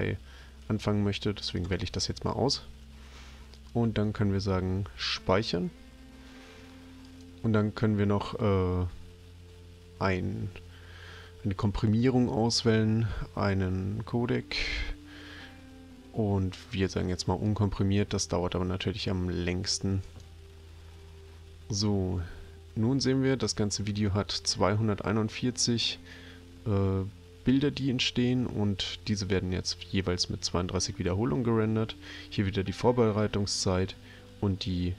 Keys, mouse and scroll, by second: 1.5 click, 3.6 click, 7.1 click, 17.5 click, 20.1 click.